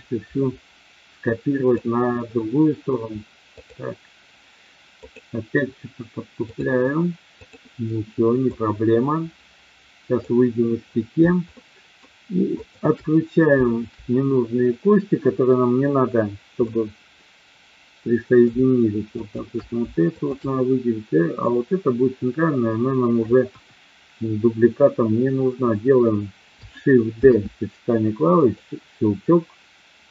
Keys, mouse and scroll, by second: 3.7-4.3 drag, 4.9 click, 6.3-7.4 drag, 8.6-10.2 drag, 11.4 shift+middle click, 12.6 shift+click, 16.6-19.1 middle drag, 19.1 shift+click, 20.1 shift+click, 23.4 KP_1, 27.1 shift+d, 28.3 click.